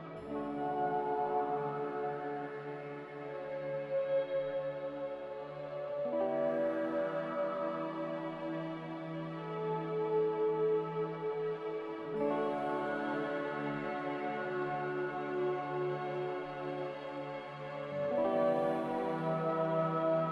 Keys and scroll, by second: 5.6 x, 9.7-10.5 typing, 12.2 z, 13.4 Delete, 15.5 Delete, 16.8 b, 18.4 Delete, 19.0 n.